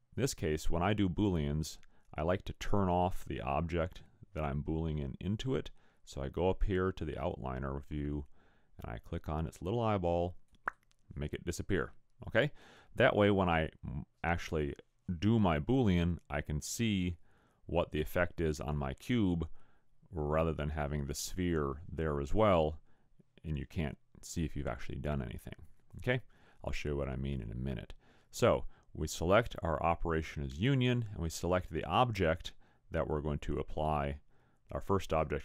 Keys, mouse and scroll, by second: 10.5 click.